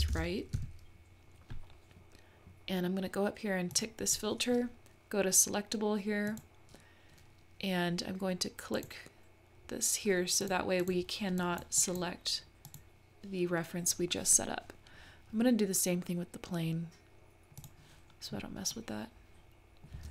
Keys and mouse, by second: 3.9-6.7 drag, 8.8 click, 11.5 drag, 11.9 click, 17.6 click, 18.8-19.8 middle drag.